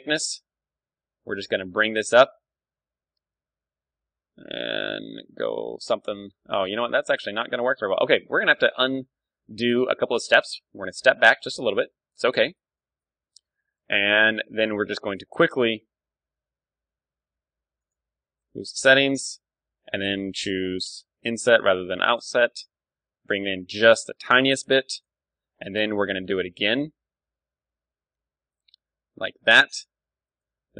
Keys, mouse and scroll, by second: 8.1 ctrl+z, 8.3 ctrl+z, 8.4 ctrl+z, 8.6 ctrl+z, 8.8 ctrl+z, 9.0 ctrl+z, 9.1 ctrl+z, 9.3 ctrl+z, 9.5 ctrl+z, 9.7 ctrl+z, 9.9 ctrl+z, 10.1 ctrl+z, 10.3 ctrl+z, 10.5 ctrl+z, 10.6 ctrl+z, 10.8 ctrl+z, 11.0 ctrl+z, 11.3 ctrl+z, 11.5 ctrl+z, 11.6 ctrl+z, 11.9 ctrl+z, 12.1 ctrl+z, 12.3 ctrl+z, 12.5 ctrl+z, 12.8 ctrl+z, 13.0 ctrl+z, 13.5-16.4 middle drag, 15.7 i, 17.9-19.4 drag, 18.4 F6, 26.0 i, 30.4-30.7 drag, 30.5 s.